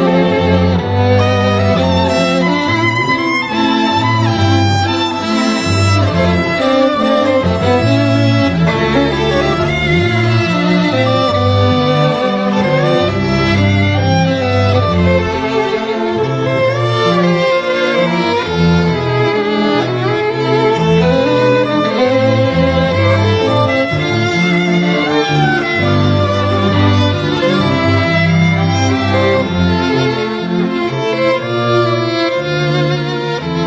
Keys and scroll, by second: 13.6 [, 14.5 [, 14.9 [, 29.6 ].